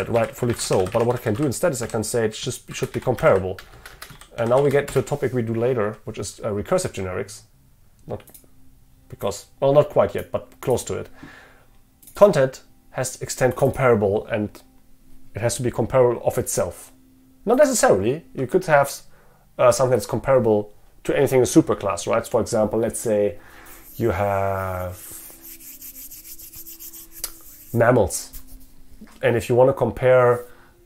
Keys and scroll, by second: 5.0 Return.